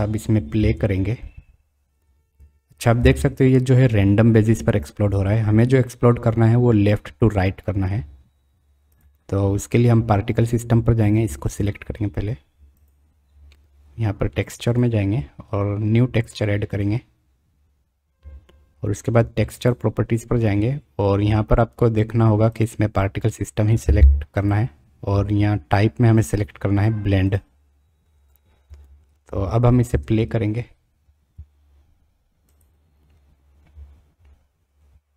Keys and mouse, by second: 0.5 space, 3.7 space, 29.9 space.